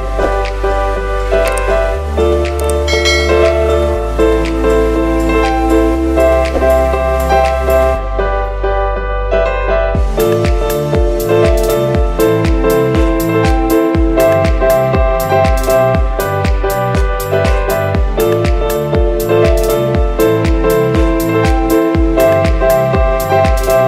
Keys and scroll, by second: 4.7 ctrl+space, 6.6 ctrl+-, 7.0 F9, 11.0 ctrl+space, 11.4 ctrl+space, 17.5 space.